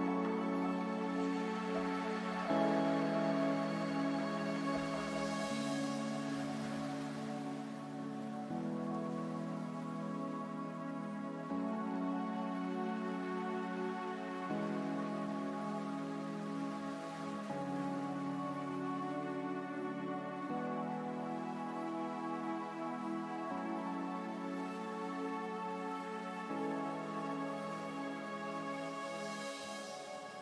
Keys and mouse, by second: 1.7 s, 3.1 Tab, 4.7 g, 6.9 Tab, 8.0 Tab, 9.3 g, 11.2 Tab, 12.7 middle click.